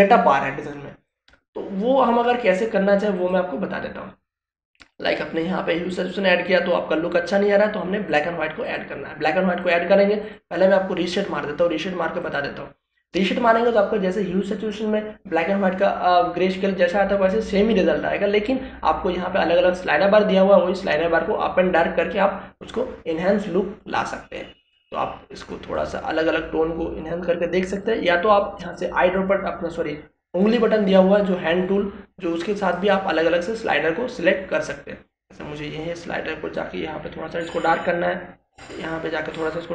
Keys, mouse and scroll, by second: 2.0 click, 9.1 click, 26.7-39.7 drag.